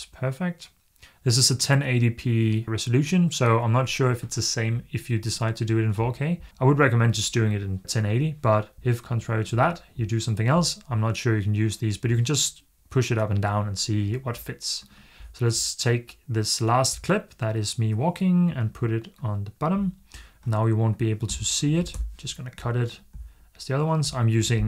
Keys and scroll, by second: 21.1 a, 21.7 BackSpace.